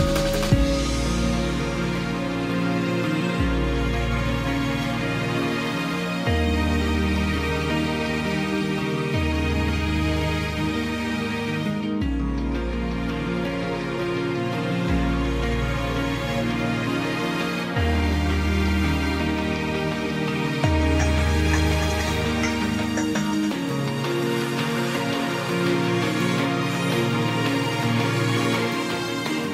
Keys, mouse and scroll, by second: 2.2 ctrl+j.